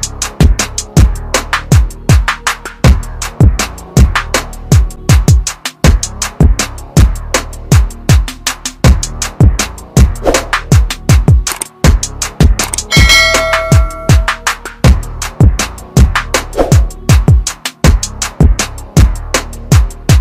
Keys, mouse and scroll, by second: 3.4 shift+click, 5.0 shift+right click, 10.2 space, 10.9 click, 14.6 p, 15.5 click, 19.4 click.